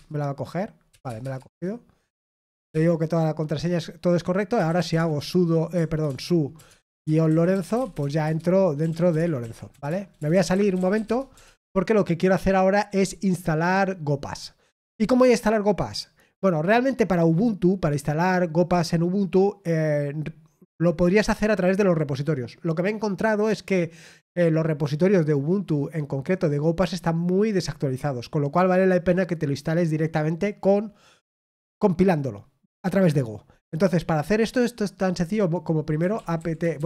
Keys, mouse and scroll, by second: 7.2-8.1 typing, 10.8-11.5 typing.